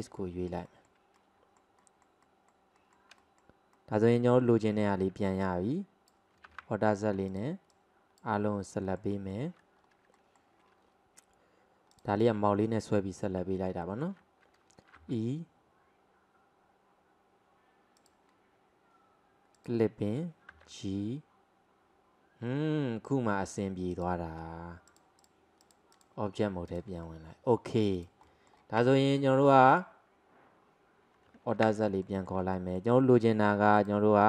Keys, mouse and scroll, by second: 0.2-3.2 middle drag, 3.8 alt+middle click, 4.3 alt+middle click, 5.5 click, 6.5 alt+z, 7.4 click, 8.9 alt+middle click, 9.2 alt+middle click, 9.9 scroll down 1, 10.2-12.0 shift+middle drag, 12.0 click, 12.2 click, 13.6 alt+middle click, 13.9 alt+middle click, 15.2 e, 19.6 click, 20.6 g, 25.0-26.4 drag, 26.4-26.8 scroll down 1, 26.8 drag, 27.1-28.0 middle drag, 28.0 click, 28.3 middle click, 28.9 Tab, 29.2-29.8 middle drag, 29.8 click, 31.6 alt+z, 32.1-33.8 middle drag, 33.8 click.